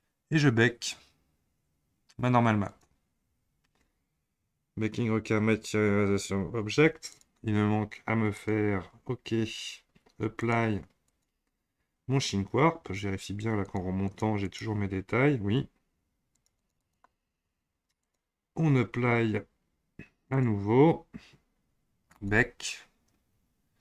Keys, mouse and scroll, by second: 2.6 click, 7.1 click, 8.3 click, 10.4-13.4 drag, 13.6-18.2 drag, 20.3 click, 22.1-23.8 drag.